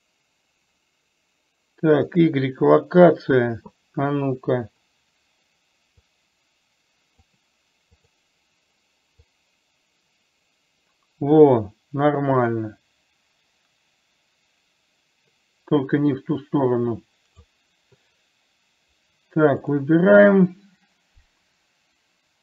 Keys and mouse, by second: 6.6-7.7 drag, 8.4 click, 9.7-17.8 drag, 20.1 click.